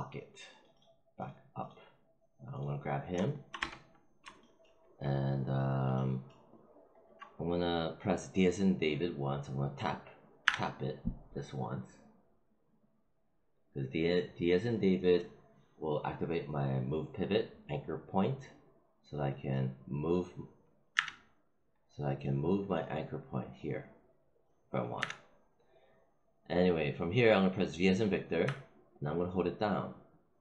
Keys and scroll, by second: 3.5 space, 10.4 d, 20.9 z, 24.9 z, 28.3 v.